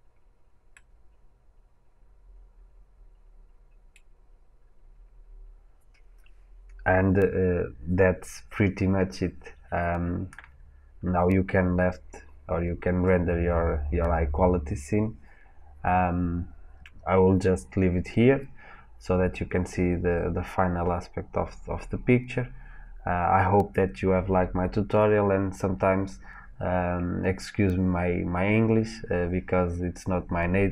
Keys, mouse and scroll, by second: 0.7-30.7 middle drag.